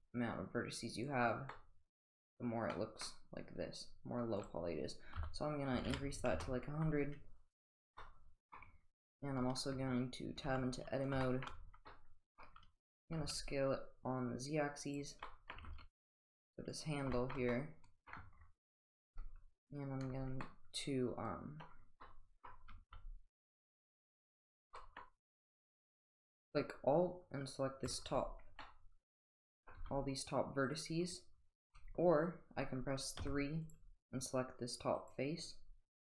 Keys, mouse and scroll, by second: 1.5-1.9 middle drag, 4.3-6.7 drag, 5.9 0, 7.5 click, 8.0-8.5 middle drag, 10.4 Tab, 11.2 shift+middle drag, 11.8-12.4 middle drag, 13.1 s, 15.2 middle click, 16.4 s, 17.1 shift+middle drag, 17.5 middle click, 17.5-18.1 middle drag, 20.5-21.6 middle drag, 22.0-22.5 middle drag, 22.7 s, 24.7 middle click, 24.8 middle drag, 27.8 alt+click, 28.6-29.7 middle drag, 29.8 g, 33.2 typing.